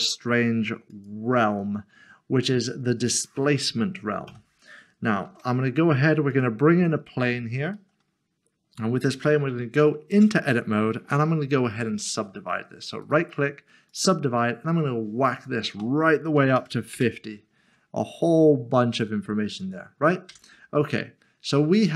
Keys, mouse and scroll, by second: 3.1 click, 5.2 a, 6.3 click, 7.3 scroll down 1, 7.7 middle click, 10.1 Tab, 11.6-13.0 scroll up 1, 13.0-13.9 scroll up 1, 13.9 click, 16.6 typing, 16.9 Return, 20.3 Return.